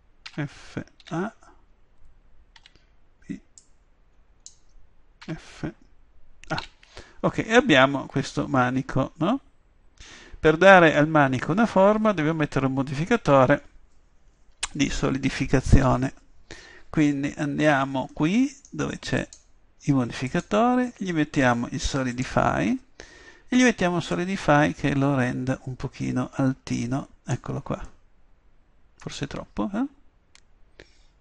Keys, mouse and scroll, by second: 0.3 f, 1.0 a, 2.6 b, 5.2 f, 6.6 a, 12.4-19.0 middle drag, 15.9 a, 19.2-22.1 drag, 24.1-25.9 drag, 27.9 click, 28.1-29.9 middle drag.